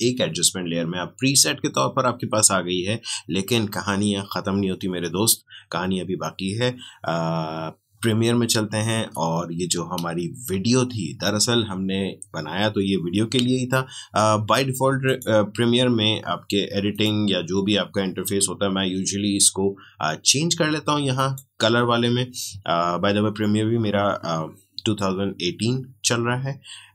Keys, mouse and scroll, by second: 8.9 alt+Tab, 15.0 click, 21.1 click, 26.7-26.9 scroll up 1.